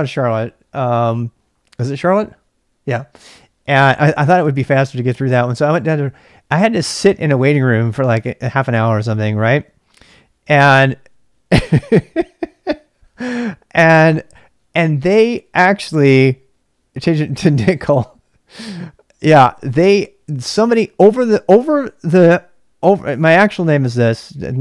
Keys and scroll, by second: 23.7-24.6 typing.